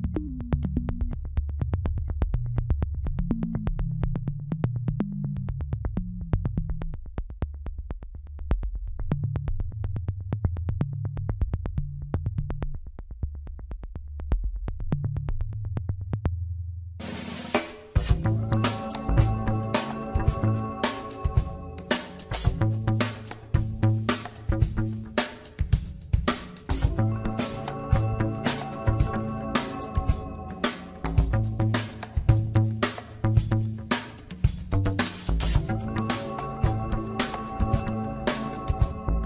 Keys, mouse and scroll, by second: 1.9 Tab, 3.1 scroll down 2, 4.6-7.2 middle drag, 7.2 click, 8.9 click, 9.9 click, 10.9 alt+shift+click, 11.5 alt+shift+click, 12.4-14.3 middle drag, 14.3 alt+shift+click, 15.4 middle click, 16.1 scroll up 1, 16.5 ctrl+z, 16.9-20.9 drag, 22.0 click, 29.2 scroll down 3, 29.8-31.8 middle drag, 31.8 click, 32.4 Tab, 33.6-36.7 middle drag, 37.3-38.3 drag, 38.3-39.2 middle drag.